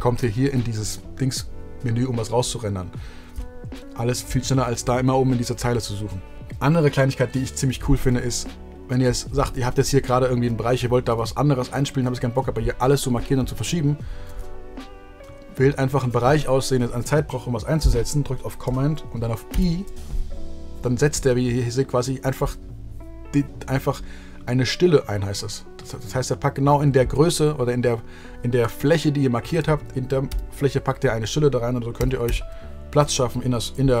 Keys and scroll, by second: 19.4 super+i, 30.2 super+i, 31.9 super+i, 32.2 super+i.